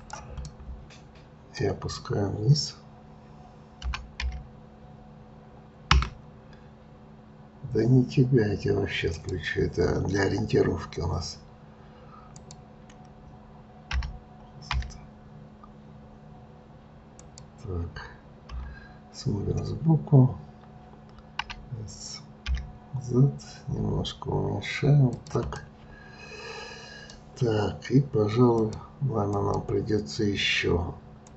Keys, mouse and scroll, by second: 0.4-3.5 middle drag, 3.8 g, 9.1 click, 12.4 click, 13.9 g, 21.4 s, 25.5-28.6 middle drag.